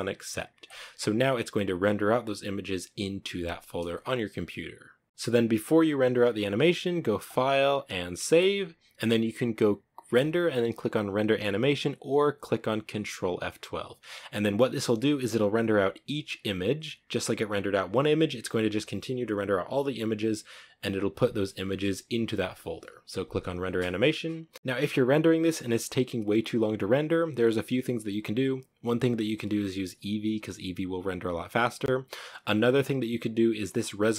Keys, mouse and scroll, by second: 24.5 Escape.